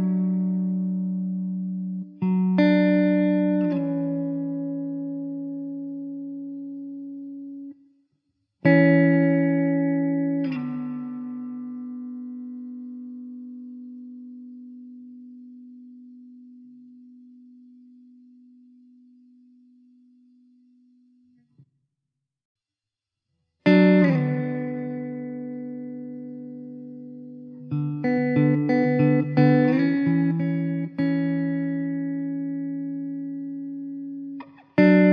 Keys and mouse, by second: 0.3 alt+middle click, 3.9 middle click, 6.6 alt+w, 8.4 middle click, 9.0 2, 15.7 alt+w, 22.0 alt+w, 22.8 w, 27.2 1, 33.4 2.